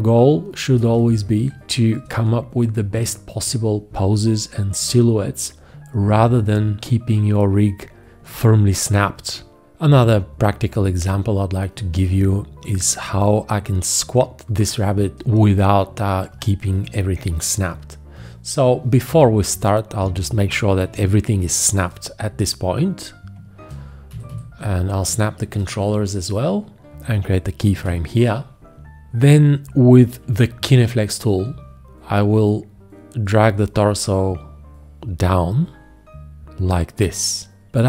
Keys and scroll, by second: 0.9 F1, 20.8 1, 21.0 `, 24.1 F1, 27.7 x, 30.2 g.